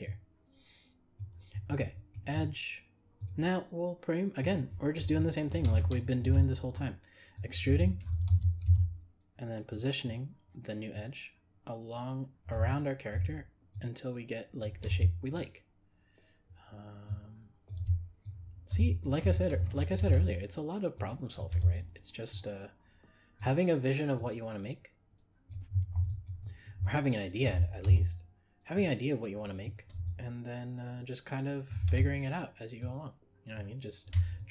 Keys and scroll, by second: 6.2 ctrl+e, 19.9 ctrl+e.